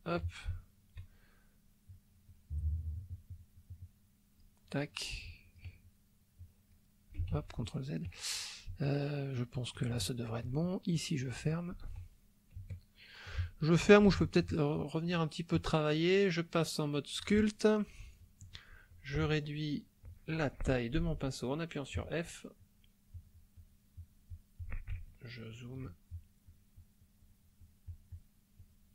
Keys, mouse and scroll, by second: 0.6 shift+middle click, 1.8-4.6 drag, 5.2 click, 6.4 click, 7.3 ctrl+z, 7.6 ctrl+click, 9.0 ctrl+click, 10.0 ctrl+shift+middle click, 11.0 shift+click, 11.8 ctrl+z, 12.7-14.6 shift+middle drag, 15.5-17.4 drag, 21.0 f, 21.9 click, 22.6 click, 23.2 click, 23.6-24.8 drag, 25.0 ctrl+middle click, 26.2-27.5 ctrl+drag, 27.6 ctrl+click, 28.6 click.